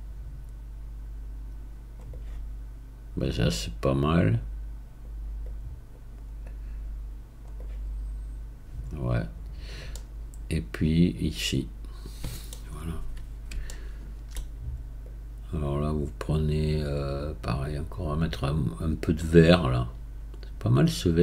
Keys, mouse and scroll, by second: 2.1-6.4 right drag, 6.4-7.6 drag, 7.6-10.2 right drag, 10.2-15.0 middle drag, 15.0-18.6 right drag, 20.8-21.2 drag.